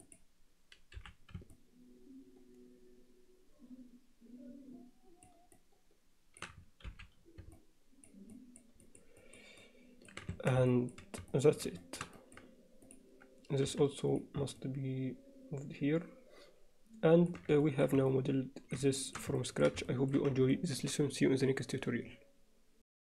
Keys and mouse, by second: 0.1 click, 1.0 h, 1.6-5.3 middle drag, 5.6 middle click, 6.9 alt+h, 7.6 alt+middle click, 8.4 alt+middle click, 8.8 alt+middle click, 9.2 alt+middle click, 9.6 alt+middle click, 10.4 Tab, 10.7 alt+middle click, 11.3 alt+middle click, 11.8 alt+shift+middle click, 12.2 middle click, 13.7 m, 14.6-16.2 alt+middle drag, 16.2-16.6 alt+drag, 16.6-17.3 alt+middle drag, 17.6 ctrl+alt+middle click, 18.1-18.8 alt+middle drag, 19.0 alt+shift+middle drag, 19.4 ctrl+alt+middle click, 19.9 alt+shift+click, 20.6 ctrl+middle click.